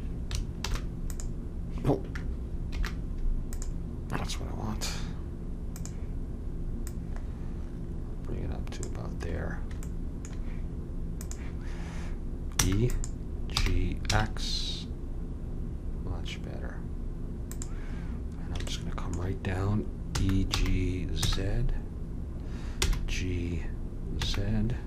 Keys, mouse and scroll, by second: 0.5 alt+space, 2.7 alt+m, 5.7 click, 8.0 click, 9.8 middle click, 11.2-12.8 drag, 12.5 e, 13.5 g, 18.6 middle click, 20.1 e.